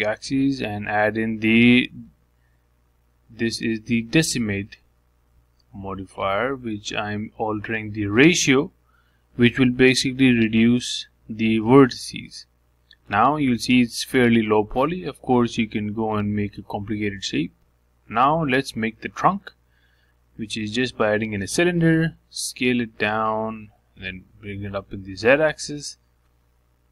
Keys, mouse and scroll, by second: 1.4 click, 3.5 click, 4.9-6.9 drag, 10.1-11.5 middle drag, 11.5 s, 13.0 s, 14.1-15.6 middle drag, 15.6-16.1 scroll up 2, 16.1-17.1 shift+middle drag, 17.1 scroll down 1, 17.4-19.4 middle drag, 20.5 shift+right click, 21.3 shift+a, 24.0 s, 25.9 s.